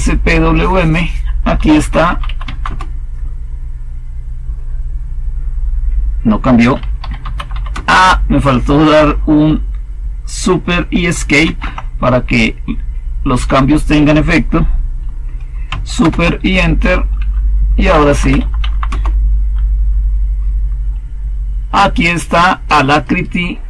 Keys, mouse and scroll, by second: 1.4-2.7 typing, 6.7-7.9 typing, 11.3 super+Escape, 15.9 super+Return, 17.5-18.8 typing, 18.8 Return.